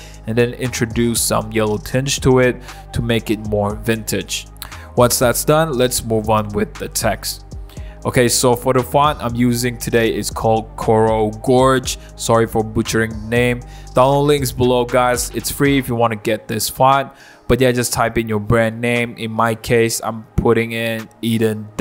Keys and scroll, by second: 0.4 0, 3.5 0, 5.5-8.9 typing, 19.3-20.2 typing, 21.4 super+=.